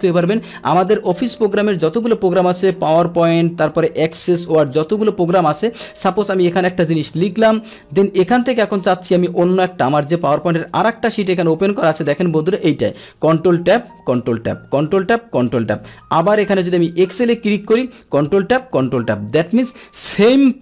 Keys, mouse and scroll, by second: 4.0 ctrl+n, 5.8 click, 7.6 click, 10.8 click, 12.3 click, 13.4 ctrl+Tab, 14.2 ctrl+Tab, 14.8 ctrl+Tab, 15.5 ctrl+Tab, 16.5 click, 17.1 click, 18.2 ctrl+Tab, 18.9 ctrl+Tab, 19.8 ctrl+Tab.